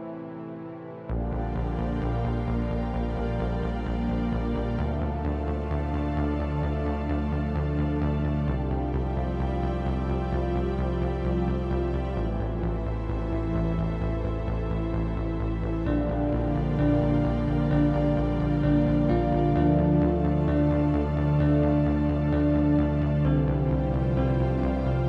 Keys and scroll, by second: 0.4 Return, 1.2-2.4 typing, 4.2-6.4 typing, 8.1-12.6 typing, 24.7-25.0 typing.